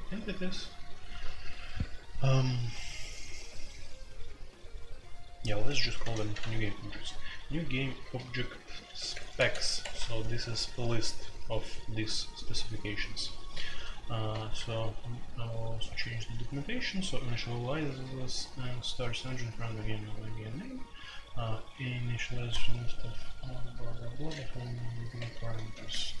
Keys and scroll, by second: 4.4 typing, 5.7-6.5 typing, 8.0-9.3 typing, 9.8 Escape, 14.3-20.5 typing, 15.3 Escape, 24.5-26.2 typing.